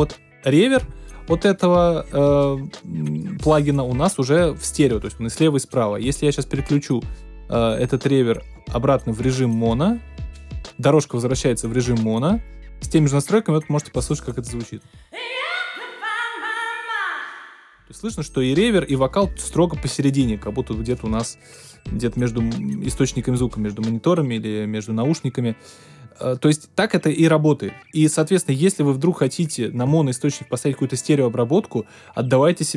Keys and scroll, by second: 14.7 space, 17.6 space.